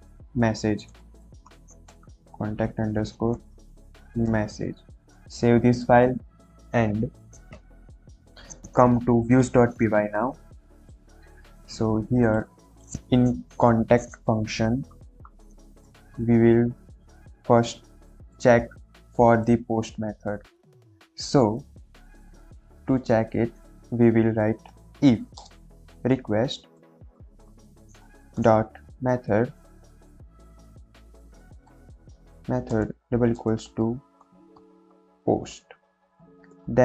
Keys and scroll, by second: 0.9-4.2 typing, 4.7 ctrl+s, 15.8 Return, 25.3 i, 25.3 f, 25.3 space, 26.7-28.7 typing, 30.4-35.1 typing, 35.7 Right, 36.3 shift+;, 36.5 Return.